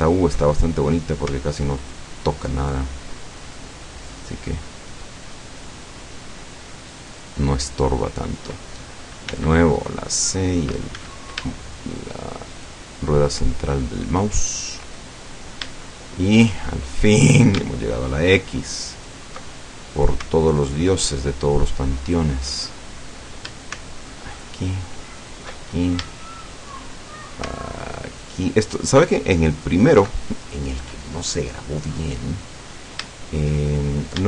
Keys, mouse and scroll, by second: 0.6 alt+shift+middle click, 1.9 alt+shift+right click, 2.6 alt+shift+right click, 7.2 alt+shift+right click, 9.4 c, 9.8 middle click, 11.0 Escape, 11.7 shift+middle click, 12.6 shift+right click, 13.3 shift+right click, 14.3-14.9 shift+scroll down 2, 15.2-15.8 middle drag, 15.9-16.6 shift+middle drag, 16.6-17.0 shift+scroll down 1, 17.0 scroll up 1, 17.9 alt+shift+right click, 19.0 alt+shift+right click, 19.5 alt+shift+middle click, 20.6 alt+shift+right click, 21.4 alt+shift+right click, 22.0 alt+shift+right click, 22.6-23.0 alt+shift+scroll down 1, 24.4 alt+shift+right click, 25.2 alt+shift+right click, 25.7-26.1 alt+shift+scroll up 1, 26.2 shift+middle click, 28.1 alt+shift+right click, 29.6 alt+shift+right click, 30.3-31.0 alt+shift+middle drag, 31.2 shift+middle click, 32.0 scroll down 2, 32.7-33.6 middle drag, 34.1 scroll up 2.